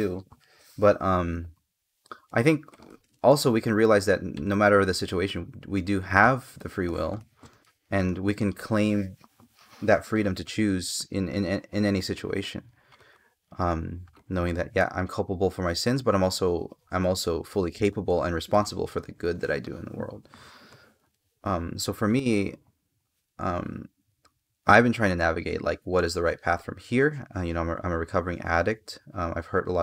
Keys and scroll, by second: 2.0 space, 6.5 space, 19.4 space.